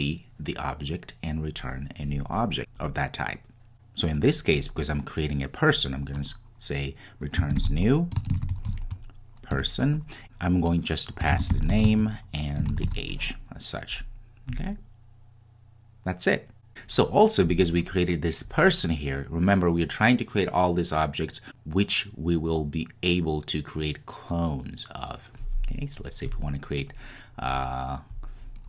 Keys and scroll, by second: 9.7 Return.